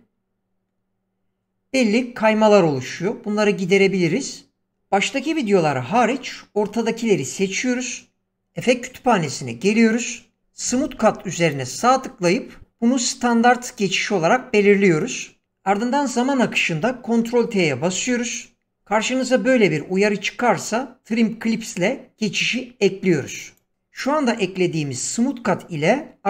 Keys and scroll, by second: 17.8 ctrl+t.